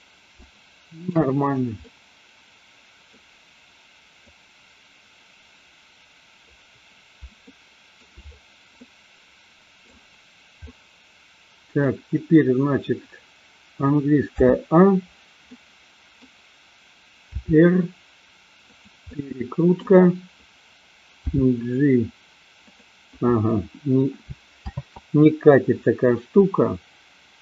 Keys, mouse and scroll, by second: 0.4-1.1 shift+middle drag, 1.9-3.1 middle drag, 4.5-6.9 drag, 7.5-8.1 shift+middle drag, 8.9-10.0 middle drag, 10.6-11.9 middle drag, 14.4 a, 15.6 middle click, 17.2 r, 19.1 middle click, 21.2 g, 25.1 ctrl+z.